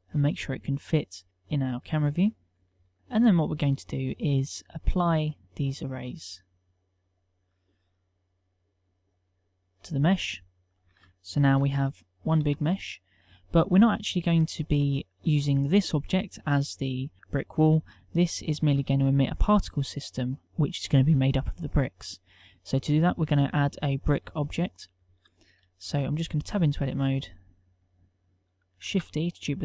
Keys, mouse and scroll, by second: 0.4 s, 1.4 g, 2.7 KP_1, 11.6 Tab, 12.5 Tab, 17.7 KP_1, 25.9 Tab, 26.7 ctrl+Tab, 28.8 shift+d.